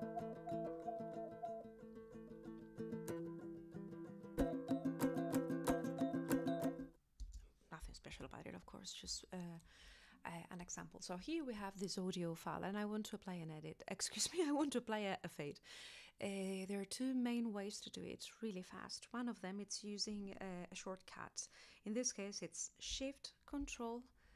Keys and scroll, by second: 7.2 space, 8.1 Return.